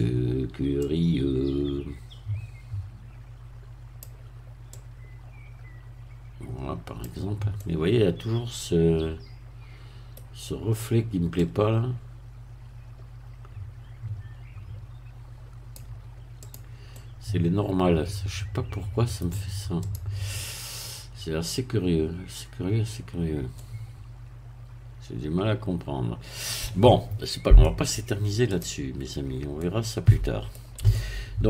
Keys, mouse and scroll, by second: 0.8-4.4 drag, 4.8-7.5 drag, 7.6-10.3 middle drag, 11.4-16.4 drag, 16.4 click, 16.9-19.4 middle drag, 19.8 click, 23.6-26.8 middle drag, 27.1-27.6 scroll down 1, 27.6 middle click, 28.5 click, 29.1 scroll up 1, 29.6-30.8 middle drag, 30.9 shift+middle click.